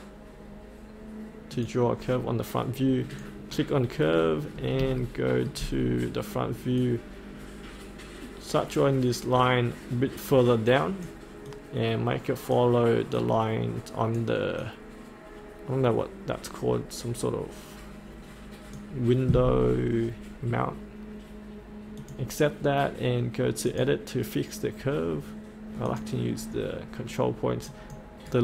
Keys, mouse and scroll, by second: 4.0 scroll down 1, 5.0 shift+middle click, 6.8-19.3 drag, 28.3-28.4 right drag.